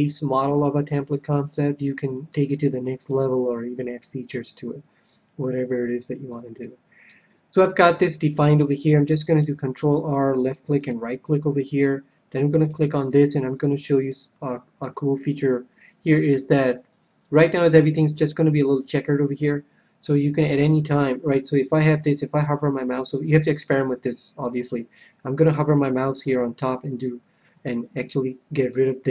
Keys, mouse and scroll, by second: 2.5-4.3 middle drag, 6.2 KP_3, 9.4 ctrl+r, 10.8-14.1 right drag, 13.5-15.7 middle drag, 28.6-29.1 drag.